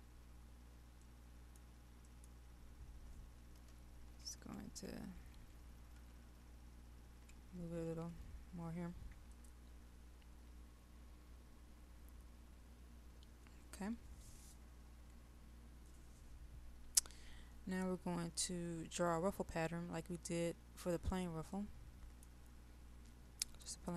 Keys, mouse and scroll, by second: 0.5-1.0 scroll down 1, 1.0 middle click, 2.4-3.7 scroll up 1, 4.1 shift+Left, 4.3 shift+Left, 4.5 shift+Left, 7.3 Left, 8.2 Down, 9.3 click, 21.6-22.7 middle drag.